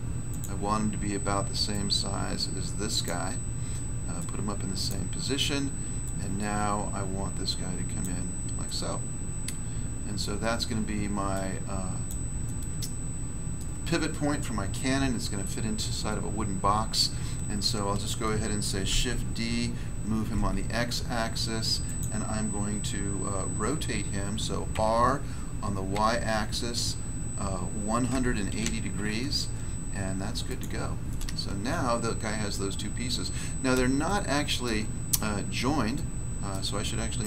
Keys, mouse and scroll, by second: 1.7 click, 3.0 click, 4.1 click, 6.0 click, 8.6 middle click, 10.1 middle click, 11.3 click, 12.0 click, 12.4 middle click, 13.5 middle click, 15.7-16.1 scroll down 1, 18.8 d, 20.3 x, 21.8 click, 21.9 click, 24.7 r, 25.8 y, 28.0-28.6 typing, 30.4 click, 30.5 click, 31.0 middle click, 32.5 middle click, 33.0 scroll up 1, 34.0 shift+middle click, 37.1 click.